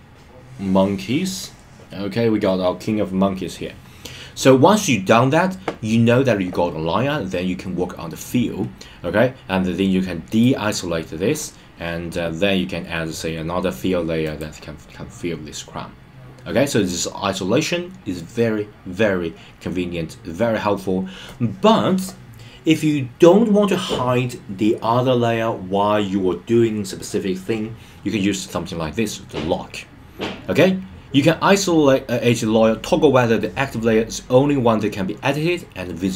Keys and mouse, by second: 10.3 click, 14.3 click.